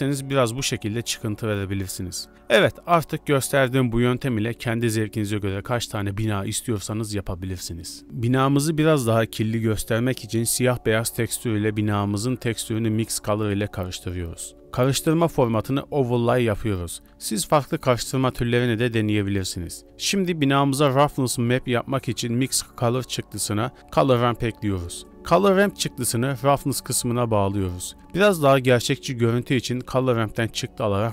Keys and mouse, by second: 0.5 e, 1.8 a, 2.0 a, 2.9 ctrl+space, 3.6 s, 3.6 g, 3.9 Tab, 4.0 click, 5.5 middle drag, 6.0-7.1 shift+middle drag, 7.4 shift+middle drag, 7.7-8.0 middle drag, 8.6-8.9 middle drag, 9.0-9.3 middle drag, 10.3 middle click, 10.5 shift+d, 12.7 shift+a, 14.1-15.4 middle drag, 15.4 click, 15.9 click, 17.0 middle click, 17.7 shift+middle click, 18.0 shift+click, 18.1 shift+middle click, 18.4 middle click, 19.1 middle click, 19.8 shift+a, 23.2 click, 24.3 click, 24.7 b, 25.6 g, 28.5 middle click, 29.5-30.1 middle drag, 30.1 click, 30.4 shift+a.